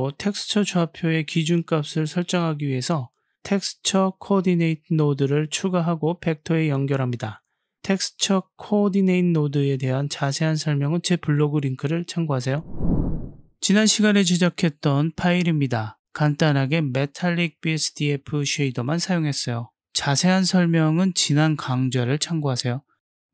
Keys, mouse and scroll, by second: 0.0 middle click, 1.0 click, 1.6 shift+a, 5.9 click, 6.5-7.1 drag, 9.1 middle click, 10.0 click, 10.9 click, 16.6-17.1 drag, 17.8 g, 20.1 click, 21.1 shift+a.